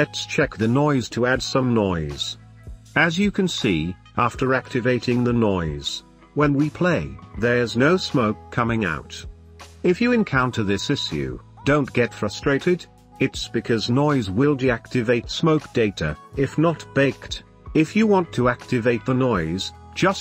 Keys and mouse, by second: 1.3-6.0 drag, 6.5 space, 9.5 space, 15.2-16.7 drag, 16.8-17.2 drag, 17.2 space.